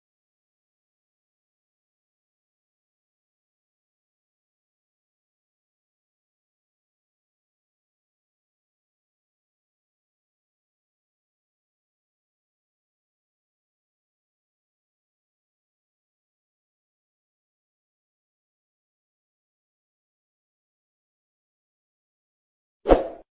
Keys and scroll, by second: 15.0 ctrl+c, 17.6 Return, 17.8 ctrl+v, 18.0 ctrl+s, 18.3 alt+Tab, 19.5 ctrl+x, 20.6 alt+Return, 21.5 ctrl+s.